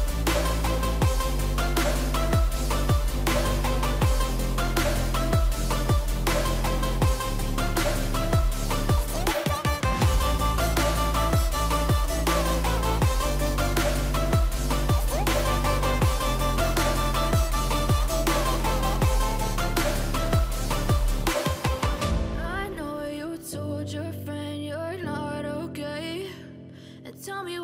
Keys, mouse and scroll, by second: 0.8 click.